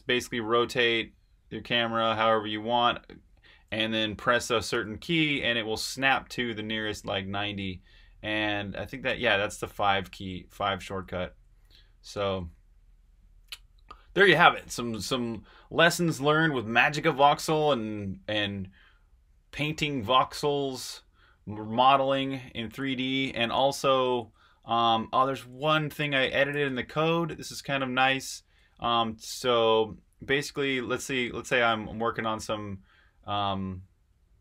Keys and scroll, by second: 4.7 5, 8.6 5, 24.5 super+Tab, 26.5 v, 26.7 Return, 28.5 Escape, 31.0 super+Tab.